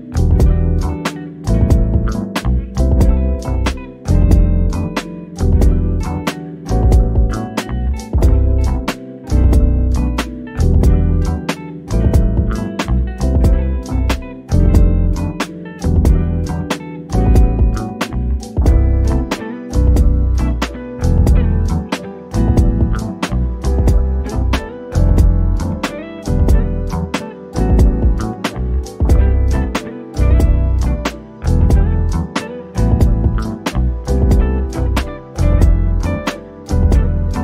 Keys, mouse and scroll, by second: 0.0-0.7 scroll up 1, 0.7-1.1 scroll up 1, 1.1 shift+click, 3.0 scroll down 1, 5.3 shift+click, 5.7 scroll up 1, 6.5 click, 7.5-8.7 typing, 9.8 shift+click, 10.7 click, 11.6-13.1 scroll down 1, 14.3 scroll up 1, 15.8 shift+click, 22.7 1, 23.7 Return, 26.1 click, 28.9 1, 29.6 Return, 30.3 click, 31.1-31.7 scroll down 1, 32.2 click, 34.5 scroll up 1, 35.8 shift+click, 36.8 shift+click.